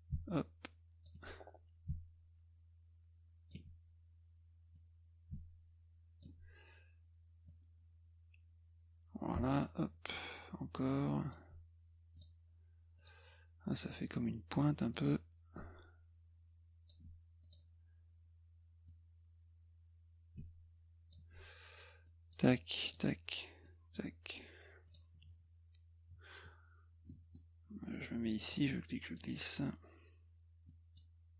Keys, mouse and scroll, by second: 1.9-3.5 shift+drag, 4.8-6.2 drag, 7.5-11.3 drag, 12.2 click, 13.0 click, 14.9-16.9 drag, 17.4 click, 18.9-21.1 drag, 22.1 click, 22.9 click, 23.7 click, 24.9 click, 27.1 middle click, 28.3 click, 30.7 click.